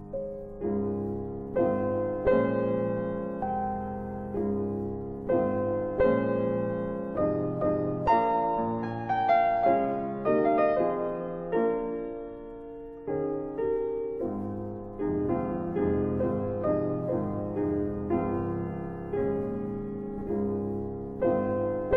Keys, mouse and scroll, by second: 5.3 click, 7.6 ctrl+alt+click, 9.6 ctrl+space, 10.5 F4, 11.4 scroll down 1, 12.2 scroll down 1, 12.8 alt+middle click, 15.5 middle click, 18.3 click, 20.4 click.